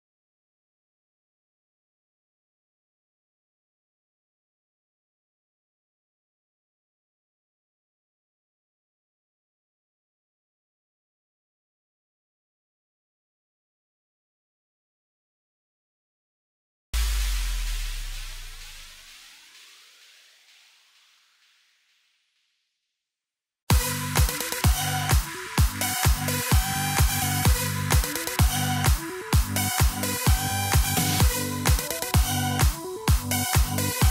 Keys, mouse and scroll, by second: 8.7-9.7 drag, 9.7 KP_1, 10.1-11.4 scroll up 2, 11.4-13.2 drag, 13.3 scroll down 5, 13.5-18.7 middle drag, 18.7 KP_0, 20.1-21.3 middle drag, 21.3 KP_0, 21.8-22.3 scroll up 7, 22.3-22.7 shift+middle drag, 23.0 scroll up 2, 23.5-24.5 scroll down 8, 24.5-26.0 middle drag, 26.0 scroll up 3, 26.2-30.0 shift+middle drag, 30.0-30.3 scroll down 1, 30.3-31.1 scroll up 1, 31.1 click.